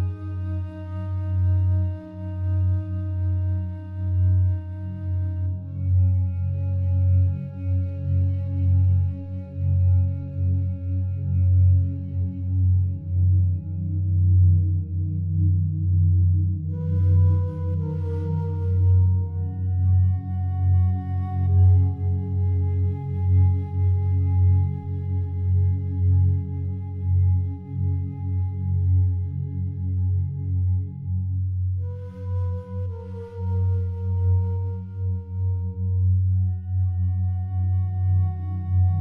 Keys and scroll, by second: 22.2 Escape, 28.1 3, 28.2 Return, 32.3 ctrl+7.